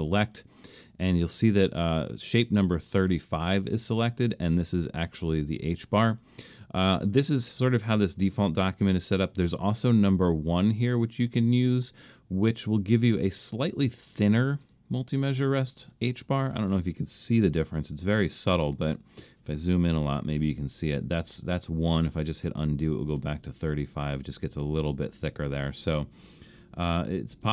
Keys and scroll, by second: 17.6 super+=, 18.2 super+=, 20.1 super+=, 23.2 super+z, 27.3 super+-.